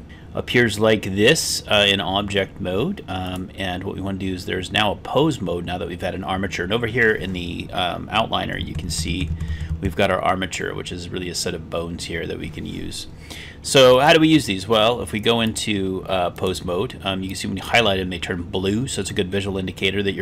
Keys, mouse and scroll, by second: 3.3-5.9 drag, 13.9 click, 15.4-16.6 drag, 17.3-17.7 drag, 19.0-20.2 middle drag.